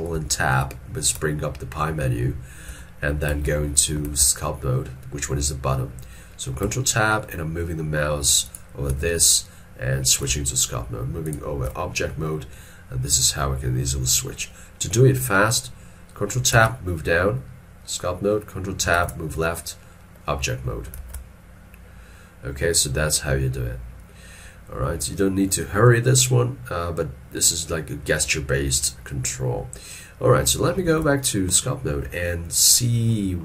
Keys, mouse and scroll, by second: 0.2 ctrl+Tab, 1.2 ctrl+Tab, 1.7 ctrl+Tab, 3.3 ctrl+Tab, 4.1 ctrl+Tab, 6.7 ctrl+Tab, 7.2 ctrl+Tab, 8.5 ctrl+click, 10.3 ctrl+Tab, 10.8 ctrl+Tab, 16.6 ctrl+Tab, 19.0 ctrl+Tab, 21.0 ctrl+Tab, 30.9 ctrl+Tab.